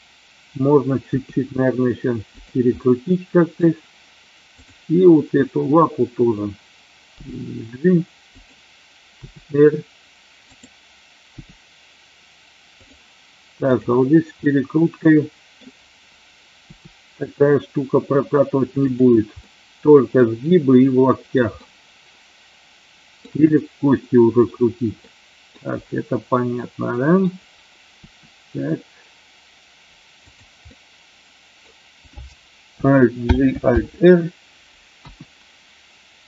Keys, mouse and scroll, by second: 1.0 r, 2.3 click, 2.7 middle click, 7.1 g, 8.3 click, 9.2 r, 10.5 click, 11.3 g, 12.7 click, 13.6 click, 14.5-15.6 middle drag, 16.7 r, 18.8 click, 19.3-20.1 middle drag, 21.6-23.2 middle drag, 24.9 middle click, 26.6 middle click, 27.9 r, 30.2 click, 30.6-31.6 middle drag, 33.2 alt+g, 33.7 alt+r.